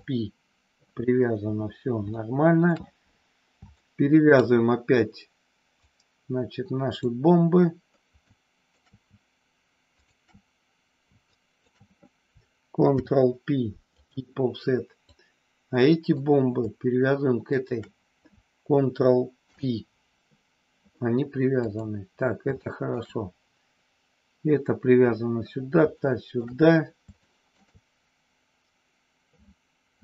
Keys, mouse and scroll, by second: 2.0 middle click, 3.8 shift+middle click, 5.9-7.2 drag, 8.3 shift+middle click, 9.9 shift+click, 11.4 shift+click, 12.9 ctrl+p, 14.9-16.3 drag, 17.5 shift+click, 19.3 ctrl+p, 21.6 click, 22.5 shift+middle click, 25.9 shift+middle click, 27.2 shift+middle click.